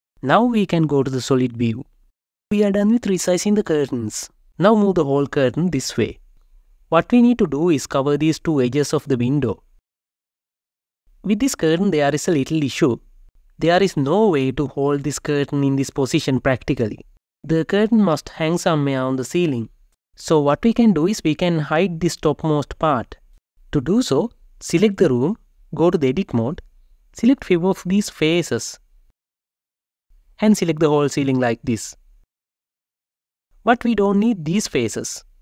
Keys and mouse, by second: 1.3 alt+z, 1.9 Tab, 2.6 alt+z, 4.4 KP_Divide, 4.4 g, 4.6 x, 24.0 click, 26.6 Tab, 28.7 click, 29.9 shift+g, 33.4 n, 35.3 shift+click.